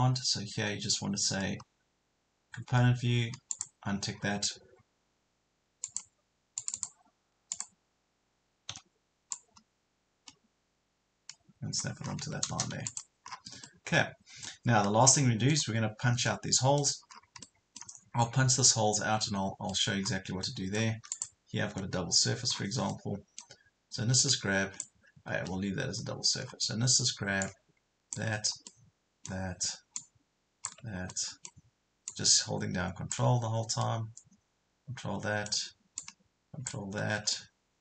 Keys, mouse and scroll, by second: 4.2 scroll up 1, 5.9 click, 8.7 p, 9.4-12.1 drag, 12.1 scroll down 1, 12.9 click, 13.6 middle click, 14.8 scroll up 1, 15.2 middle click, 16.0 scroll down 1, 16.3 middle click, 17.2 scroll down 1, 17.4 middle click, 20.0 scroll up 1, 20.4 middle click, 21.1 click, 21.7 Delete, 22.6-22.9 scroll down 1, 22.9 middle click, 24.2 click, 25.4 ctrl+z, 26.4 scroll down 1, 27.4 ctrl+click, 28.7 middle click, 30.0 ctrl+click, 31.1 middle click, 32.1 ctrl+click, 33.8 middle click, 36.0 ctrl+click, 37.4-37.8 middle drag.